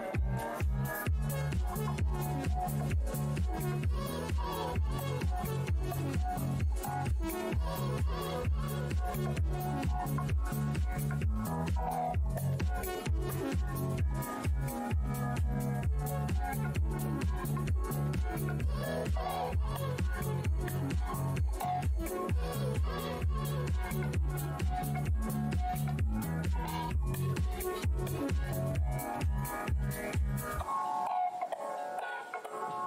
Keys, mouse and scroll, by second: 0.1 click, 3.9 shift+right click, 5.2 space, 6.0 alt+click, 6.5 alt+scroll, 6.9 shift+v, 8.4 w, 8.9 click, 9.9 z, 10.9 w, 11.4 click, 12.5 v, 13.3 Delete, 14.2 space, 14.8 click, 14.9 scroll down 1, 15.7 click, 16.5 alt+click, 16.6 scroll down 1, 16.6 r, 18.9-22.9 typing, 19.3 alt+h, 19.4 alt+scroll, 19.8 alt+scroll down 1, 22.9 click, 23.3 shift+right click, 24.2 alt+click, 24.2 alt+w, 24.4 v, 25.0 r, 25.6 space, 26.4 e, 27.1 click, 28.6 w, 30.0-31.0 typing, 32.3 v.